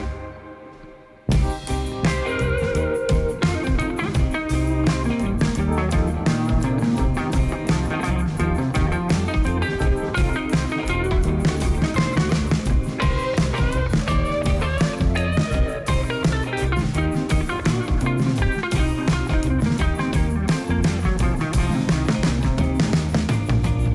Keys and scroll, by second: 2.4 Tab, 3.9 alt+a, 9.0 shift+a, 10.7 Tab, 11.4 s, 11.7 1, 11.9 0, 12.0 Return, 13.0 Tab, 14.2 1, 14.7 g, 15.2 z, 17.2 shift+z, 21.0 b, 21.2 g, 21.3 Return.